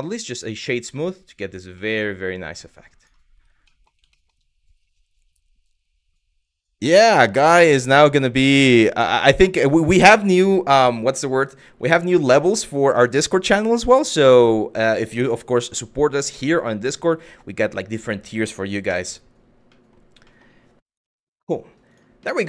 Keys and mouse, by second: 0.6 middle drag, 1.5-1.8 middle drag, 3.3 middle drag, 3.8 shift+middle click, 12.3-12.7 middle drag, 15.9 middle drag, 18.5 KP_1, 19.4 middle click, 19.9 middle drag, 20.6 KP_Divide, 21.5 click, 21.9 middle drag.